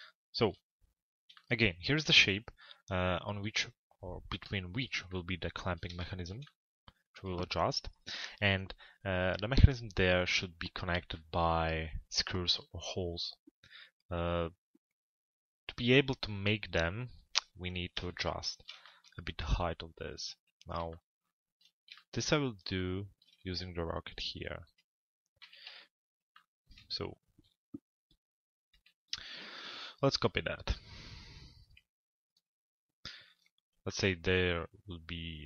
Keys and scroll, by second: 25.0 f, 25.6 z.